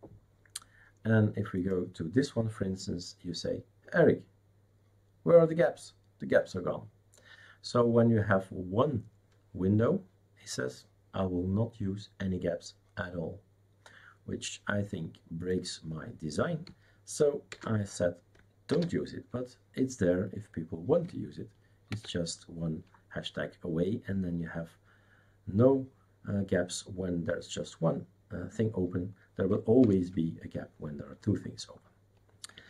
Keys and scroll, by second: 17.5 #, 18.7 ctrl+s, 21.9 shift+super+c, 29.8 super+Return.